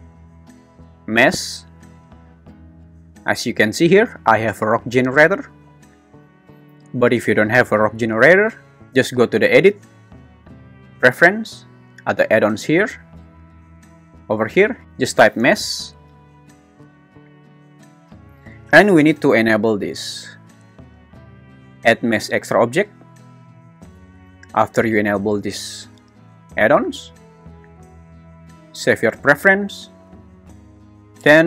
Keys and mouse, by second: 8.8 Escape, 9.8-11.0 drag.